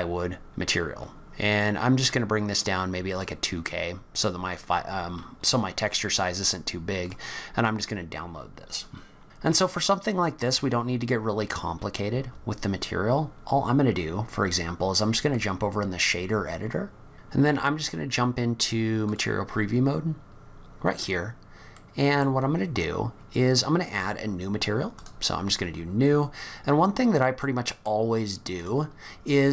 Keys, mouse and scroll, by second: 9.2 scroll down 4, 9.5 click, 9.9-10.6 scroll down 3, 10.6 scroll up 2, 12.7 scroll up 1.